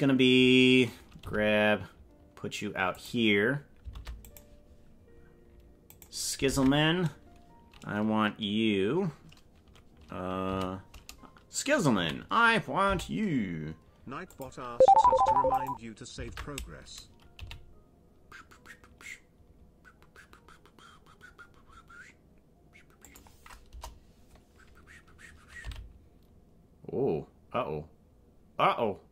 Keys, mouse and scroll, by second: 1.2 g, 3.9 ctrl+Tab, 4.2 right click, 6.0 right click, 6.4 ctrl+Tab, 10.4 a, 12.0 a, 12.8 g, 15.2 ctrl+Tab, 15.5 right click, 16.2 ctrl+Tab, 17.3 g, 23.6 KP_0, 25.6 g.